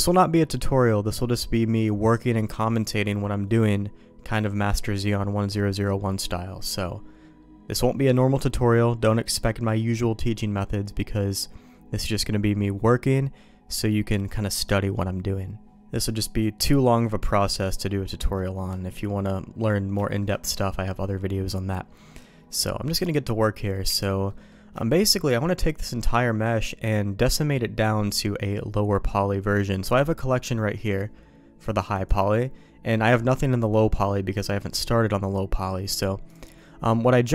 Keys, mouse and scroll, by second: 16.0-18.4 middle drag, 20.0 shift+middle click, 22.1 middle click, 23.8 z, 24.3 middle click, 24.8 shift+middle click, 25.0 middle click, 25.9 shift+middle click, 30.7 middle click, 31.6 click, 31.9 click, 35.5 middle click, 36.3 click, 36.6 middle click.